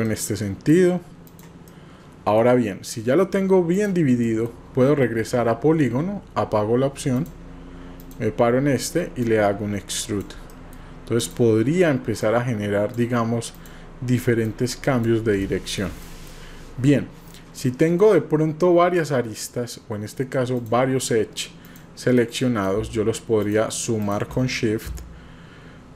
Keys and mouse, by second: 0.0 middle click, 1.3 click, 1.7 middle click, 3.7 click, 3.7 typing, 4.3 middle click, 7.2 click, 9.2-10.3 drag, 10.6 middle click, 11.1 click, 12.2 click, 14.4 click, 15.5 shift+middle click, 16.2 middle click, 17.3 middle click, 20.6 click, 21.6 click, 22.2 middle click, 23.5 shift+click, 24.4 middle click.